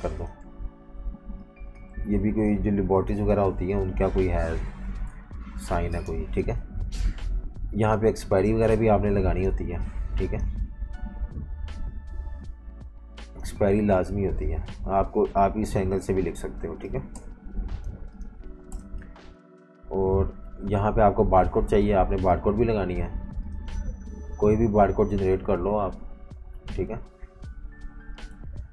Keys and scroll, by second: 0.4 typing, 5.1 super+-, 5.2 super+-, 5.9 typing, 9.5-11.2 typing, 17.1 shift+super+], 18.7 shift+super+[, 20.5 v.